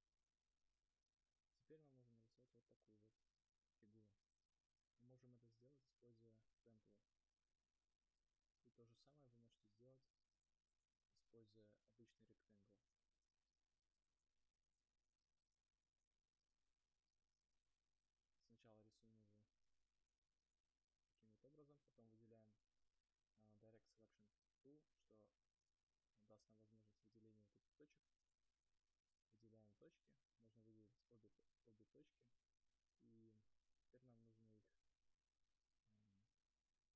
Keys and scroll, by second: 13.0 ctrl+z.